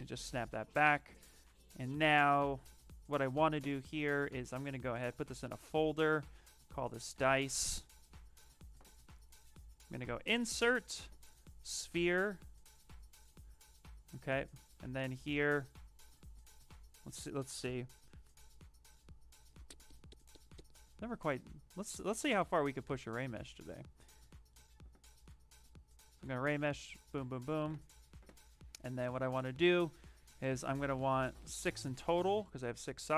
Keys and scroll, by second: 0.5 q, 1.6 s, 4.9 ctrl+f, 6.4-7.5 typing, 12.3 w.